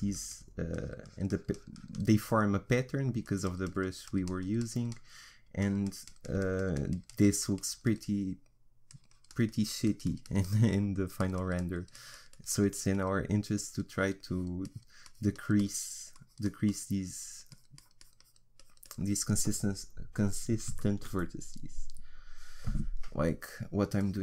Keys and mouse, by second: 20.8-24.0 middle drag, 24.0-24.2 drag.